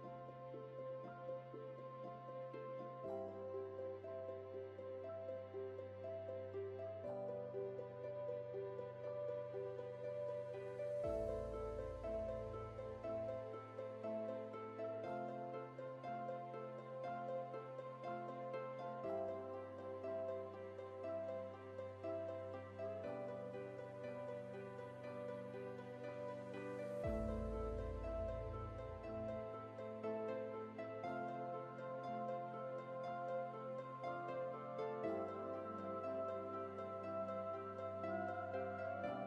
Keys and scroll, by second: 30.3 ctrl+z, 36.3 ctrl+z.